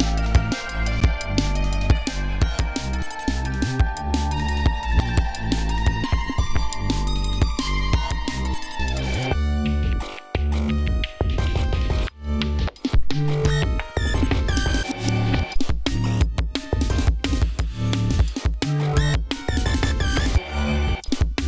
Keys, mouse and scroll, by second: 0.6-1.3 drag, 1.7-2.0 scroll down 1, 2.2 scroll up 1, 2.6 scroll down 2, 3.4 scroll down 2, 4.1 scroll down 2, 6.4 scroll down 2, 7.7-8.2 scroll up 2, 9.1 click, 10.8 click, 11.9-12.8 ctrl+scroll down 5, 13.1 scroll up 2, 14.4 ctrl+scroll up 2, 15.5-15.8 scroll down 2, 16.2-16.8 scroll down 5, 17.2 ctrl+scroll up 2, 18.6 ctrl+scroll down 2, 19.3 ctrl+scroll down 1, 20.8-21.1 scroll down 1.